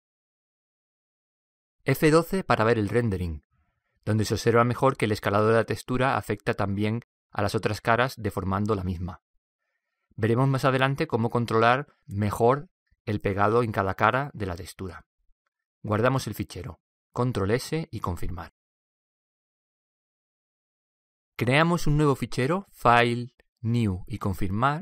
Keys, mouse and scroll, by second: 19.3 ctrl+s, 22.7-24.4 drag.